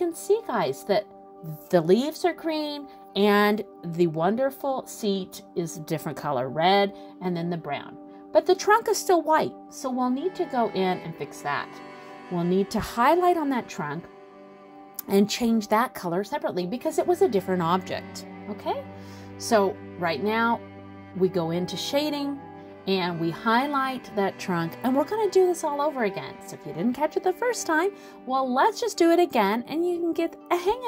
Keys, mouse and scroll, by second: 0.4 click, 0.8 middle click, 2.1 click, 4.3 click.